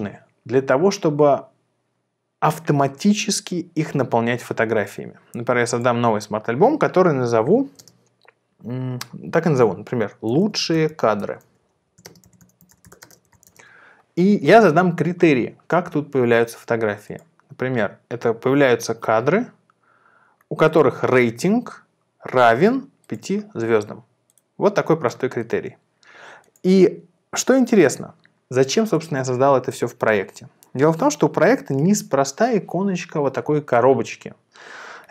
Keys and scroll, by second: 10.0-14.0 typing.